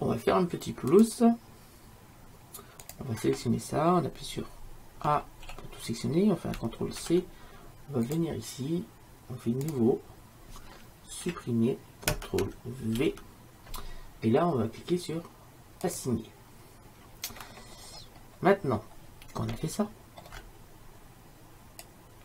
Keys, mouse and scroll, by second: 1.0-2.8 drag, 5.2 a, 5.5 a, 7.1 ctrl+c, 11.2 click, 11.3 Delete, 13.1 ctrl+v, 15.9-17.8 drag.